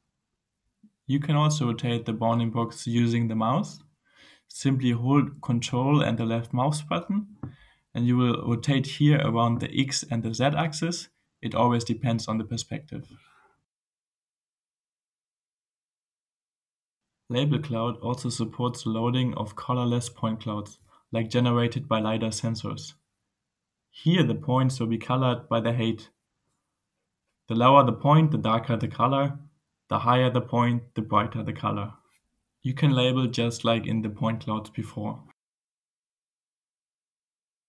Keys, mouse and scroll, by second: 0.1-1.4 typing, 3.4 d, 3.9 a, 7.8-9.7 ctrl+scroll up 2, 9.7-14.3 ctrl+scroll up 1, 17.6 click, 20.0-21.1 right drag, 24.4-26.1 drag, 32.0-33.2 drag, 33.8 click, 34.6-35.3 scroll up 3, 35.8 scroll up 2.